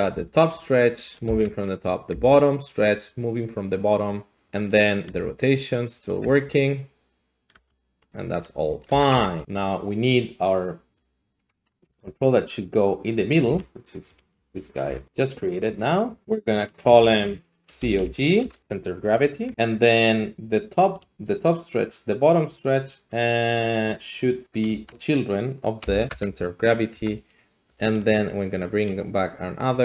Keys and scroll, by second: 0.1 g, 1.3 Escape, 4.5 Escape, 5.1 Escape, 6.2 g, 7.5 r, 8.1 alt+r, 8.1 alt+g, 8.6 a, 8.8 a, 9.0 alt+r, 9.1 alt+g, 11.8 Tab, 13.5 a, 14.8 s, 16.8 F2, 17.7 typing, 18.4 Return, 19.5 Tab, 24.9 Tab, 25.8 ctrl+p, 26.1 Return, 26.9 Tab.